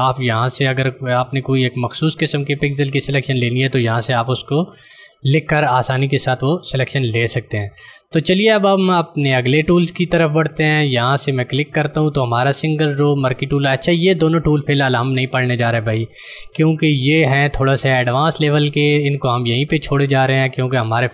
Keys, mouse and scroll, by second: 10.7 click.